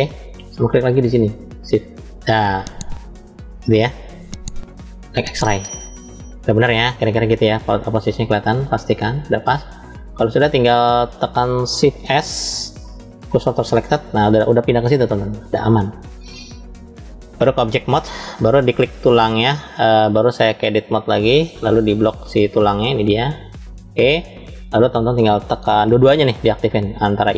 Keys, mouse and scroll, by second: 1.5 shift+click, 2.4-4.1 middle drag, 4.9 click, 5.8-7.6 middle drag, 7.7-8.7 scroll up 2, 8.7-9.8 shift+middle drag, 10.0-11.2 middle drag, 11.2 scroll up 1, 11.9 shift+s, 16.5-17.5 drag, 18.8 click, 20.4-21.4 drag, 22.7-24.2 drag, 25.8 click, 26.5 middle click.